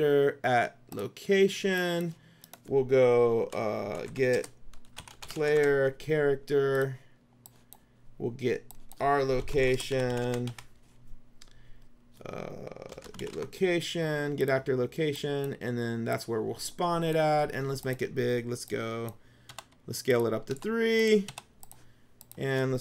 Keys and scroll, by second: 3.5-6.2 typing, 9.2-11.1 typing, 12.8-13.9 typing, 19.6 KP_3.